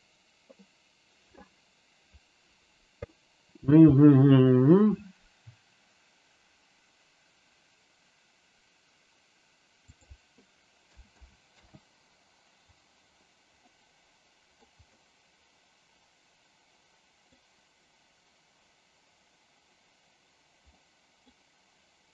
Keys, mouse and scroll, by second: 9.8-13.3 drag, 13.6 middle click, 14.5-17.3 scroll up 2, 20.7 middle click.